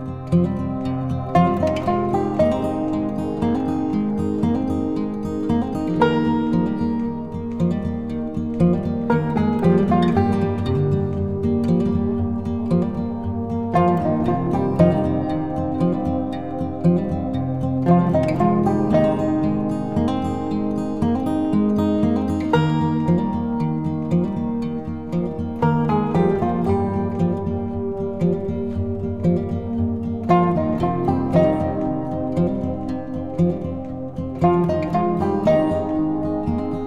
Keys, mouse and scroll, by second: 2.4 click, 5.6-13.8 drag, 13.7 ctrl+t, 15.2-20.9 alt+drag, 20.9 Return, 22.0-35.4 drag.